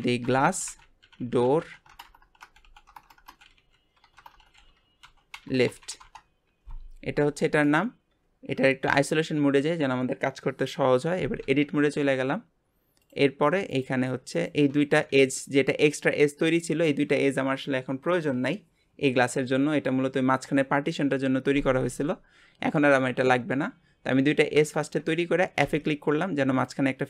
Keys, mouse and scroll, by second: 0.0 s, 1.2-4.3 typing, 7.2 g, 8.8 KP_Divide, 11.5 Tab, 11.9-13.0 scroll up 1, 13.0 click, 14.3 shift+click, 25.2-25.6 scroll up 1, 25.6 f.